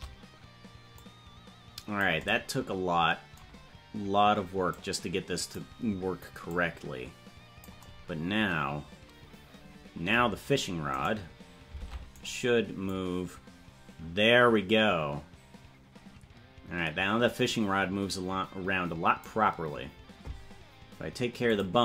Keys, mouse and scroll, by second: 0.9-2.0 drag, 4.7 click, 6.5-7.6 drag, 11.0 right click, 11.8 ctrl+Tab, 12.2 right click, 12.8-19.3 drag, 21.5 click.